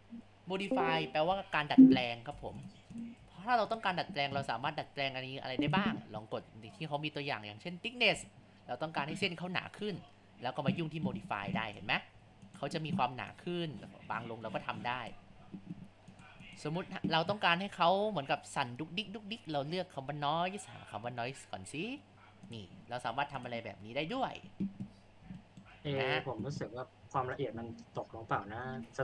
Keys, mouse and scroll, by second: 2.3 Tab, 3.0 click, 3.7 click, 5.6-12.1 drag, 12.1 Tab, 13.3-19.5 drag, 23.1 Tab, 24.1 space, 25.0 scroll up 1, 25.5 middle click, 25.9 scroll down 1, 27.6 scroll down 1.